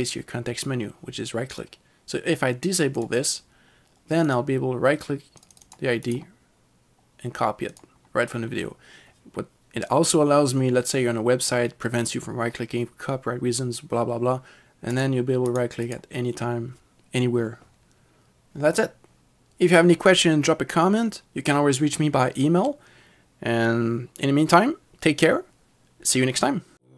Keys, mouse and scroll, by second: 1.6 click, 5.7 double click, 6.1 right click, 7.7 right click, 7.8 click, 15.0 right click.